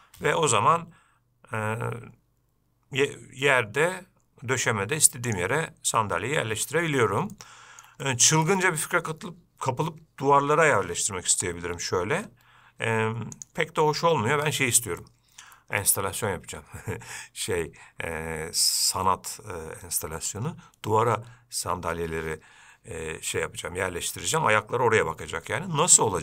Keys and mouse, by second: 7.6-8.0 shift+middle drag, 8.3 middle click, 8.8 ctrl+middle drag, 11.6 g.